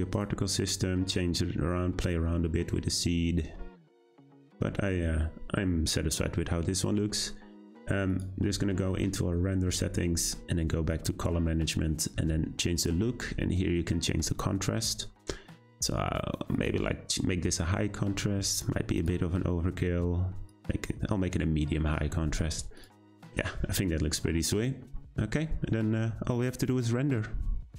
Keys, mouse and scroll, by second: 4.5 click, 16.6-22.8 drag, 23.2 scroll up 1.